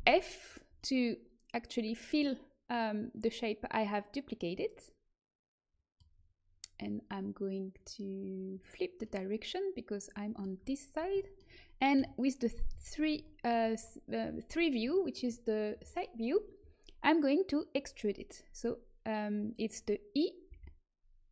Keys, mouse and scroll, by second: 3.4-4.8 middle drag, 7.7-9.0 drag, 9.0-11.9 middle drag, 11.9 KP_3, 12.6 z, 16.1-20.4 middle drag, 20.4 e.